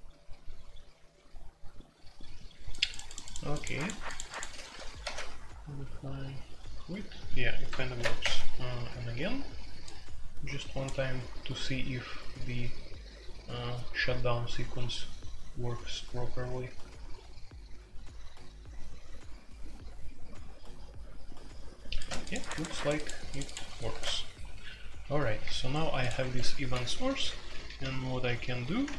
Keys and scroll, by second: 5.0 super+c, 7.9 alt+p, 8.2 Return, 23.9 shift+c, 26.2 Escape, 27.0-28.9 typing, 28.8 Escape.